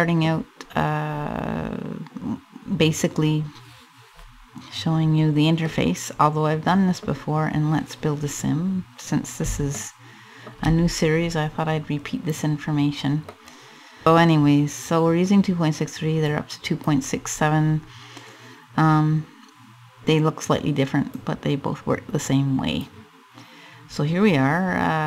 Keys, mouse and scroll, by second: 0.0 scroll up 2, 0.7-1.1 scroll up 2, 5.3 middle click, 6.7 scroll up 2, 9.3 shift+middle click, 10.5-11.2 scroll up 5, 11.9 right click, 13.0 middle click, 15.9 click, 16.9-17.4 scroll up 3, 20.7 click, 24.8 click.